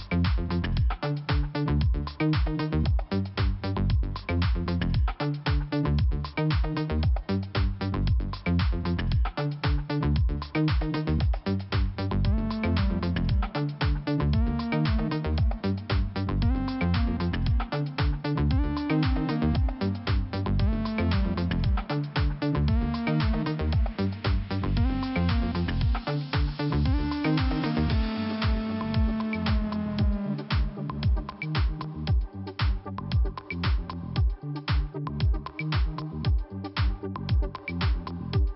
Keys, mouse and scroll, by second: 0.3 click, 0.5 click, 1.0 scroll down 2, 1.7 right click, 1.8 right click, 3.1 click, 4.6 scroll up 1, 5.6 click, 5.7 click, 6.3 click, 8.0 click, 8.1 click, 8.7 click, 9.7 scroll down 1, 10.7 click, 12.0-12.4 scroll down 3, 13.0 scroll up 1, 13.8 click, 14.3 click, 17.1 click, 17.2 click, 17.6 click, 19.4 click, 23.1 click, 23.7 click, 25.2 click, 28.4 click, 30.0 click, 31.2 click, 32.6 click, 34.1 scroll down 1, 34.7-35.1 scroll up 1, 35.5 scroll up 1, 35.6 click, 37.7 scroll down 1.